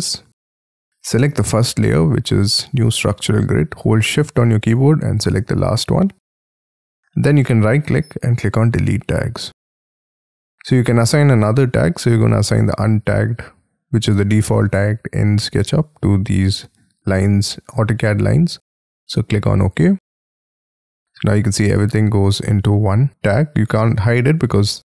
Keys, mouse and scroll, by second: 4.7 shift+click, 7.2 right click, 23.3 double click.